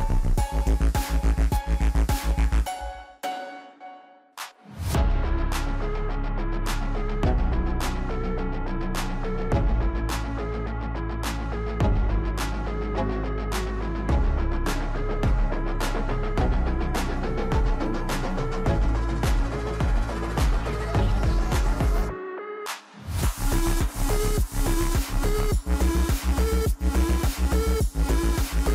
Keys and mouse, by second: 1.5 middle click, 2.2 shift+middle click, 3.5 click, 4.1 shift+a, 7.0 middle click, 7.6 s, 8.7-9.7 shift+middle drag, 10.7 click, 12.7 click, 13.2 shift+d, 15.1 KP_7, 16.0 g, 18.4 KP_0, 19.1 click, 19.6 s, 23.8 click, 24.8 click, 28.4 click.